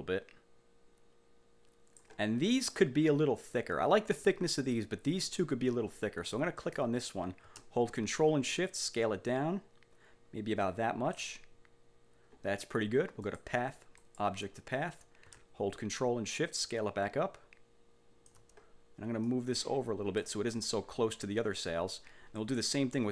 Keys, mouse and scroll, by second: 6.7 click, 8.8-11.4 ctrl+shift+drag, 13.4 click, 14.1 click, 16.1-18.6 ctrl+shift+drag, 19.4-20.5 ctrl+drag, 22.4 click.